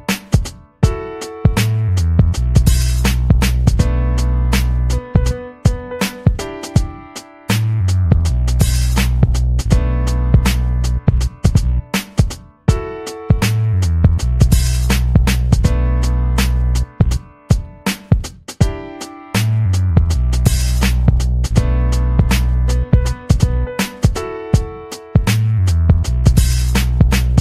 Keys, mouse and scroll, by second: 0.9-1.3 scroll down 2, 1.3-2.6 drag, 4.1 click, 4.4-5.4 typing, 5.7 click, 6.5 click, 8.3-8.8 scroll up 4, 9.1 scroll up 2, 10.1-11.1 scroll down 4, 11.5 scroll down 1, 21.1 click, 22.3 click, 22.6 click, 23.5 scroll up 1, 25.2 scroll up 1.